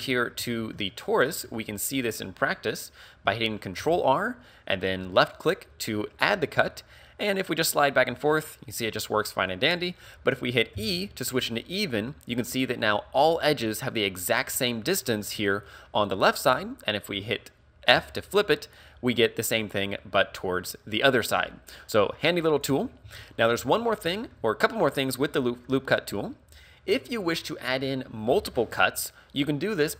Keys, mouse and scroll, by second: 0.5 shift+middle click, 0.9 middle click, 1.6-2.5 scroll down 3, 3.8 ctrl+r, 22.6 right click, 23.1 ctrl+z, 23.3-23.8 scroll down 1, 23.8 shift+middle click, 23.8-24.3 scroll down 4, 24.3 middle click, 25.2 middle click, 25.9-26.2 scroll up 2, 26.3 shift+middle click.